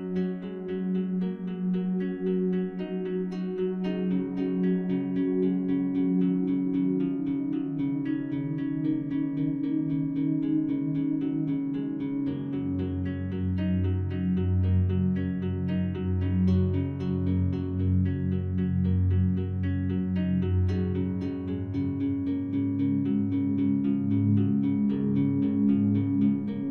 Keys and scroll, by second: 3.5 ctrl+z, 26.2 ctrl+z.